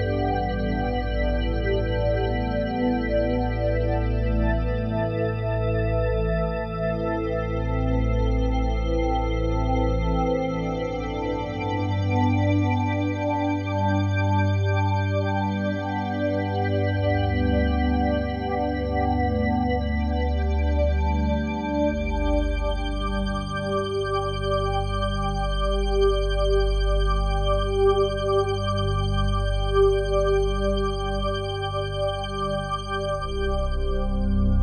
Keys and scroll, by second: 34.5 F4.